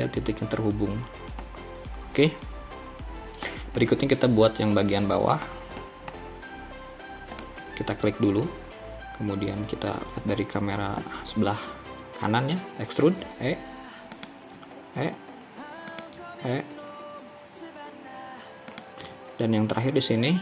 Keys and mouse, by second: 1.5-3.6 middle drag, 3.9-5.6 middle drag, 5.9 middle click, 10.3 KP_3, 13.0 e, 14.6 e, 16.2 e, 19.1 e.